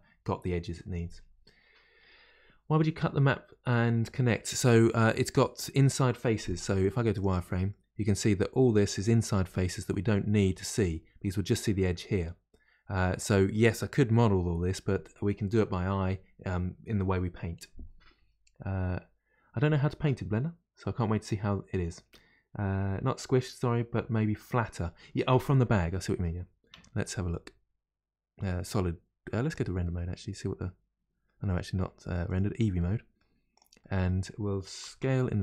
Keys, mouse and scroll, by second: 4.4-6.6 middle drag, 6.6 z, 7.7-13.4 middle drag, 29.8-32.3 middle drag, 32.3 click, 32.8-33.5 middle drag, 33.5 click, 33.8-34.8 middle drag, 34.8 s, 34.9 s.